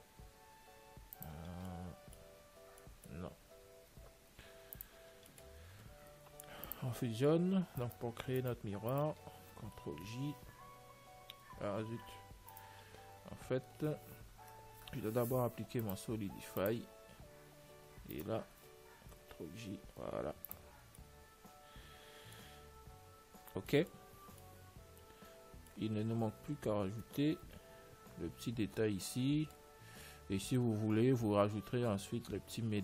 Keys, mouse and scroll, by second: 2.0-5.0 middle drag, 2.6 Tab, 4.2 x, 5.4-6.9 middle drag, 5.8 Tab, 6.9 ctrl+s, 8.3-11.1 right drag, 10.5 ctrl+j, 12.1 ctrl+z, 12.4 middle click, 13.1-14.9 right drag, 16.1-18.7 drag, 18.5-20.3 right drag, 19.6 ctrl+j, 20.6 ctrl+s, 21.1-26.7 middle drag, 31.3-32.8 middle drag.